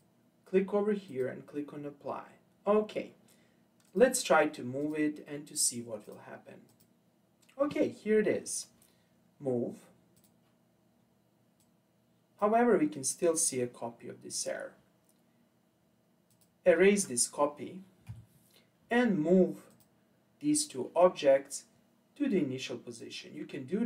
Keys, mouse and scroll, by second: 3.9 click, 4.8 click, 6.0 click, 6.7 click, 10.2-11.7 drag, 16.3 click, 18.1 Delete, 19.7 click.